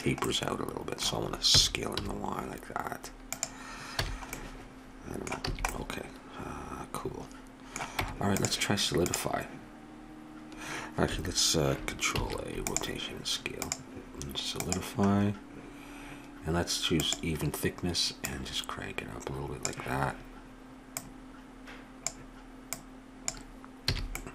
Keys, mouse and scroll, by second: 0.3-2.2 middle drag, 1.5 s, 4.0 a, 5.5 a, 8.0 Tab, 12.2 ctrl+a, 17.0-22.7 drag, 22.8 click, 23.9 a, 24.1 middle click.